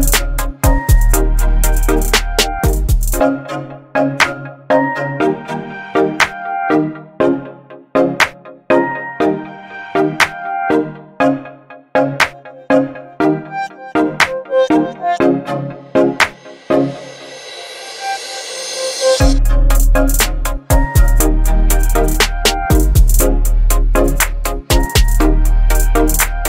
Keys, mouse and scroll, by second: 6.4-7.7 alt+scroll up 2, 9.9 alt+scroll up 1, 9.9-16.2 shift+drag, 18.6 ctrl+0, 20.8 right click, 22.0 click, 23.1 right click, 25.2 click.